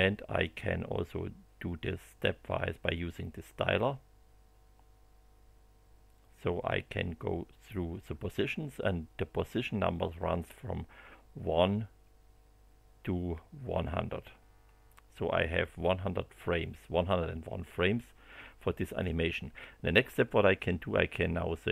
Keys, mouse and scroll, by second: 1.8-9.0 drag, 11.6-19.2 drag.